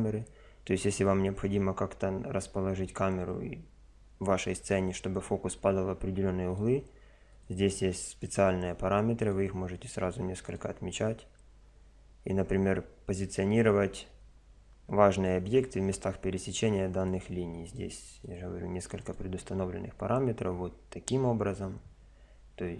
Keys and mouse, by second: 6.5 click, 9.2 click, 17.0-19.9 drag.